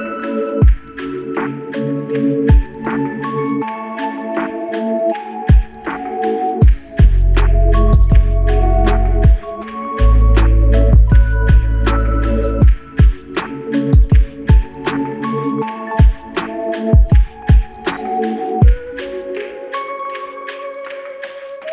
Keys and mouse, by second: 0.0 shift+click, 1.5 shift+l, 4.7 shift+click, 5.0 shift+double click, 5.3 shift+click, 7.1 alt+click, 8.2-9.6 typing, 13.9 double click, 17.1 shift+click, 17.9 shift+click, 20.1 double click.